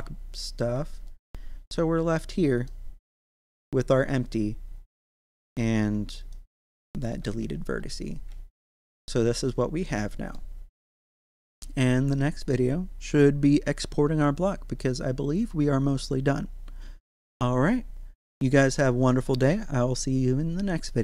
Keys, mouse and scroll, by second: 1.1 right click, 1.9-2.4 scroll up 1, 2.7-4.0 shift+middle drag, 4.0 right click, 4.9 scroll up 1, 5.4 right click, 5.7 Tab, 6.2 right click, 6.6 x, 6.9 click, 7.2 Tab, 7.6-8.3 scroll down 1, 8.5-19.0 shift+middle drag.